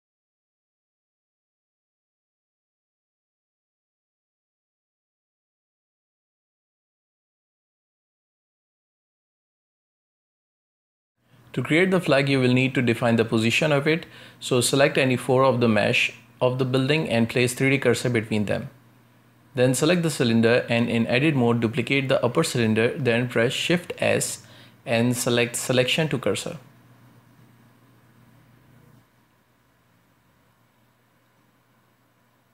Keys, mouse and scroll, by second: 1.5 click, 2.0 middle click, 2.7 Tab, 2.9 scroll down 1, 3.2 r, 5.0 r, 5.6 Tab, 5.8 middle click, 5.9-6.5 scroll down 3, 6.0-6.4 middle drag, 6.5-7.0 shift+middle drag, 7.0 space, 7.2 scroll up 2, 7.5-7.9 shift+middle drag, 7.9 shift+`, 8.4 space, 11.0-11.7 shift+middle drag, 11.7 ctrl+space, 12.6-14.0 right drag, 14.0-14.6 shift+right drag, 14.6 shift+right click, 15.6 shift+s, 18.1-19.2 shift+middle drag, 19.2-20.3 right drag, 21.2 Tab, 22.3 right click, 23.2 k, 25.4 shift+d, 27.9 shift+s.